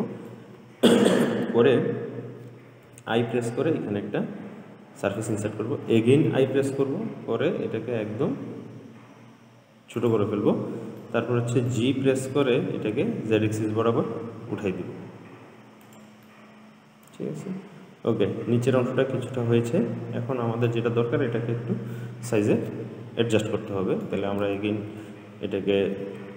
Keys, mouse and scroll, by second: 3.1 i, 6.6 i, 11.3-12.5 middle drag, 12.5 g, 16.5-19.6 middle drag, 24.1 middle click, 24.7 Tab, 25.1 Tab.